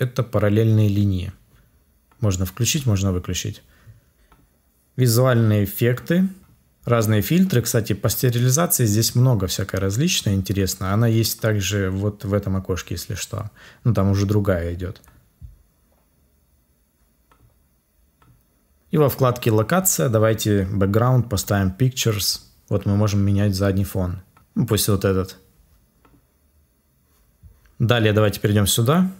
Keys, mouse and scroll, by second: 4.1 ctrl+z.